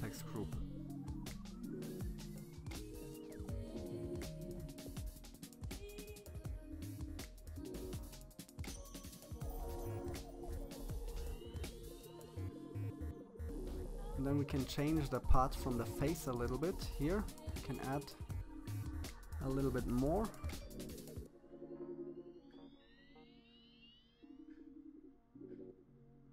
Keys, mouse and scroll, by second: 1.6 click, 2.3-4.1 scroll up 4, 5.7-7.5 drag, 9.8 middle click, 10.2 middle click, 10.2 scroll down 3, 10.4 middle click, 10.8 click, 11.2 scroll down 1, 11.2 middle click, 11.6 middle click, 12.2 click, 12.4 scroll up 3, 12.5 scroll down 1, 12.7 click, 14.5 click, 14.8 scroll down 1, 14.9 scroll up 2, 15.1 click, 16.5 KP_1, 16.6 shift+middle click, 17.2 click, 19.2 scroll down 5, 19.2 middle click, 19.6 click, 20.9 middle click, 21.0 KP_1, 21.1-21.4 scroll up 14, 21.4 click, 23.6-23.9 scroll down 6, 23.7 middle click, 23.9 middle click, 25.8 middle click.